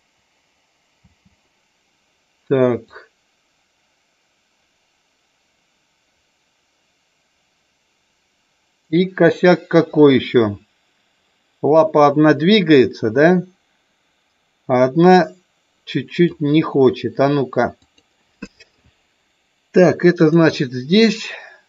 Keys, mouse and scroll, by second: 1.0 space, 2.8-16.2 drag, 17.7 click, 20.1 click.